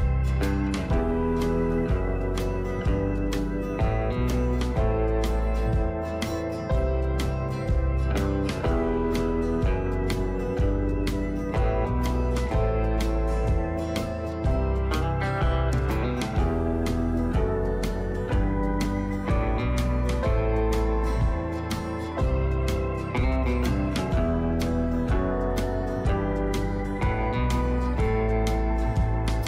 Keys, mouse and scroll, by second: 0.4-2.4 drag, 5.8 ctrl+g, 8.7 alt+shift+click, 15.3 right click, 17.1 click, 21.7 alt+shift+click, 27.1 right click.